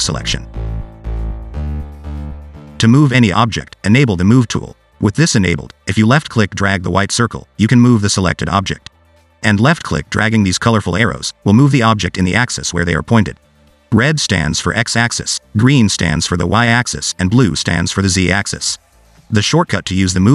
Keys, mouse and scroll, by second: 3.9 click, 5.6 click, 6.6 scroll up 2, 7.2 click, 14.4 click, 16.1 click, 18.2 click.